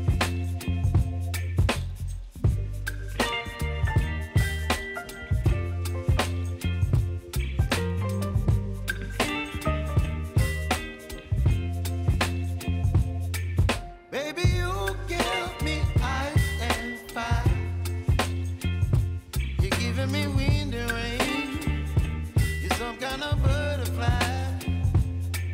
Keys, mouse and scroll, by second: 1.2 ctrl+y, 3.7 click, 4.0 ctrl+a, 4.5-6.0 typing, 6.8 click, 9.3-10.7 typing, 11.4 click, 20.7-25.5 drag.